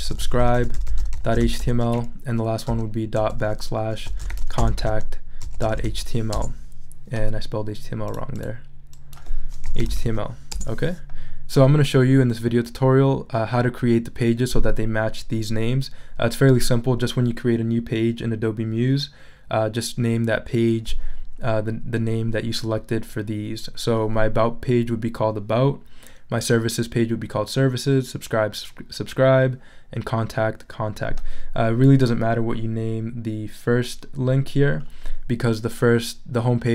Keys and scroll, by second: 0.0-1.9 typing, 3.2-6.3 typing, 9.4-10.4 typing, 10.5 Return.